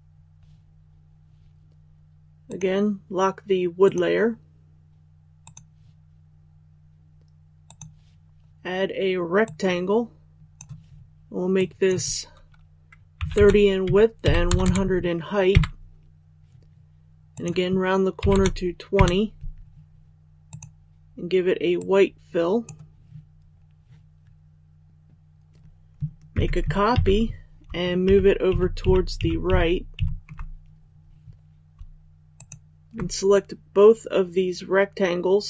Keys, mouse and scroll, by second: 2.4-11.2 drag, 13.8 Tab, 17.3 click, 26.3 ctrl+c, 26.9 ctrl+v, 28.0 shift+Right, 28.5 shift+Right, 28.8 shift+Right, 29.2 shift+Right, 29.4 shift+Right, 29.9 shift+Right, 32.3 shift+click.